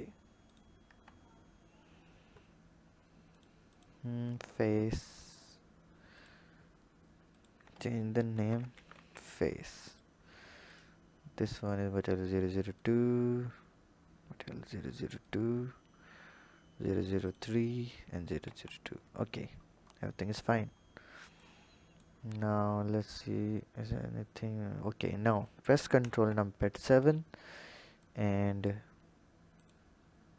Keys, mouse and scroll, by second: 0.0 scroll down 1, 0.5 click, 0.9 Tab, 1.7-3.4 scroll up 1, 3.4 click, 3.7 click, 5.1 click, 6.2 click, 7.3-10.0 drag, 10.6 click, 12.7 click, 15.2 click, 17.2 click, 18.5 Tab, 19.1-19.6 scroll down 2, 19.6-20.6 scroll down 4, 20.6-21.4 scroll down 5, 21.4 click, 22.2-23.0 scroll down 5, 23.0 click, 26.0 ctrl+KP_7, 28.0-29.7 drag.